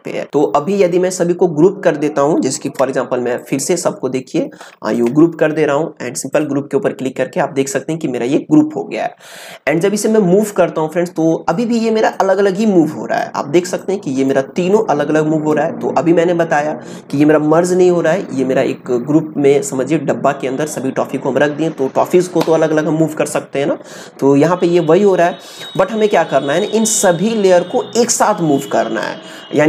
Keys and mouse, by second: 3.3 shift+click, 11.5-17.8 drag, 25.6 click.